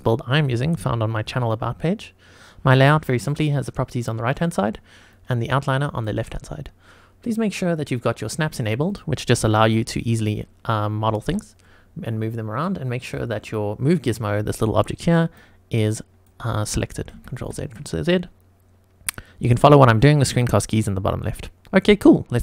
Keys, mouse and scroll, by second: 3.4 click, 5.1 click, 7.7 click, 8.9 click, 9.6 g, 11.2 Escape, 13.0-14.2 drag, 15.0 click, 17.1 ctrl+z, 17.4 ctrl+z, 19.8 click.